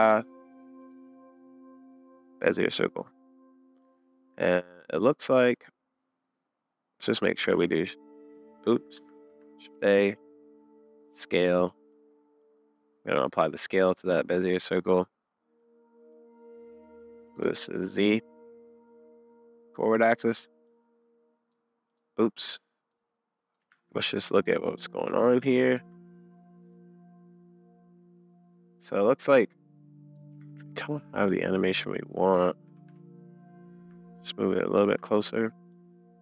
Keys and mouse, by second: 5.3-6.5 middle drag, 7.5 ctrl+s, 9.1 ctrl+a, 11.3-11.9 middle drag, 12.8-13.3 middle drag, 15.6-17.4 middle drag, 22.9 super+z, 22.9 middle click, 23.7 super+z, 24.7 middle click, 25.5 shift+middle click, 28.2-30.2 drag, 30.4 super+z, 31.2 drag, 31.4-31.8 middle drag, 32.7 g.